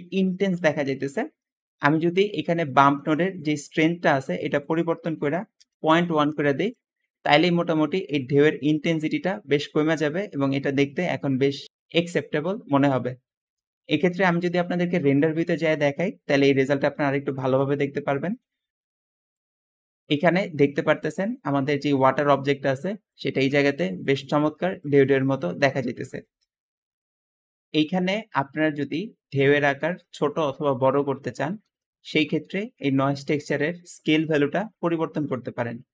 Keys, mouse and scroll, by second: 1.3 middle click, 1.3 scroll down 2, 1.6 middle click, 1.6-2.2 scroll up 2, 2.8 middle click, 2.8 scroll, 3.2 middle click, 3.2-3.5 scroll up 2, 3.5-3.9 scroll down 2, 4.3 click, 5.4-6.6 typing, 19.8 `, 26.1 Escape.